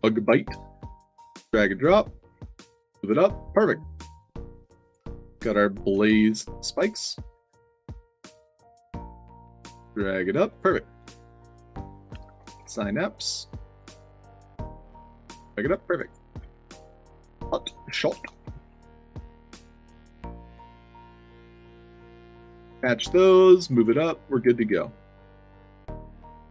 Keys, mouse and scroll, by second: 0.9 drag, 1.4-1.7 drag, 2.7-3.0 drag, 3.4 click, 4.1 click, 4.7 click, 6.1 a, 7.0 drag, 7.6 drag, 8.1 click, 9.0 click, 9.3 click, 9.7-10.1 drag, 10.4 click, 10.9 click, 11.6 click, 12.0 s, 12.6 a, 13.4 drag, 14.0 drag, 15.1 drag, 15.5 click, 15.9 click, 16.3 f, 17.4 click, 18.2 o, 18.5 space, 18.6 s, 19.7 o, 20.6 o, 21.7 drag, 22.3 drag, 23.4 click, 24.3 click, 24.5 f, 25.1 middle click, 26.0 click, 26.3-26.5 typing.